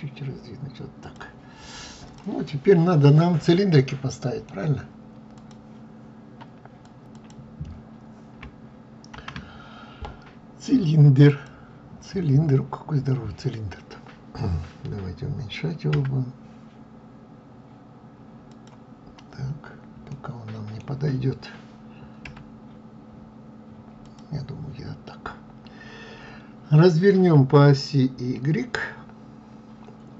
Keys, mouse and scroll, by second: 2.0 click, 2.4-8.9 middle drag, 11.2 shift+a, 11.9-12.3 scroll down 4, 15.7 s, 18.8 scroll up 2, 19.7-22.0 middle drag, 22.0 s.